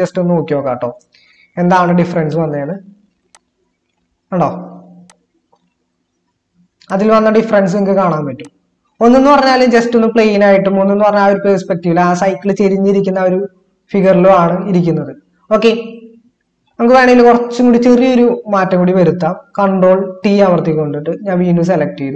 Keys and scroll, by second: 1.0 ctrl++, 20.0 ctrl+t.